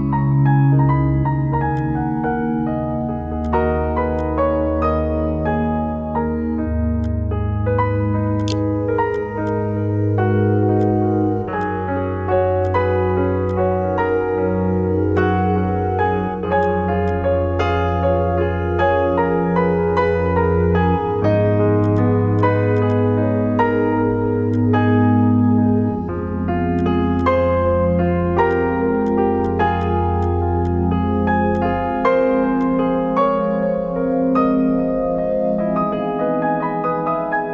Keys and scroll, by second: 7.7 t, 8.4 ctrl+b.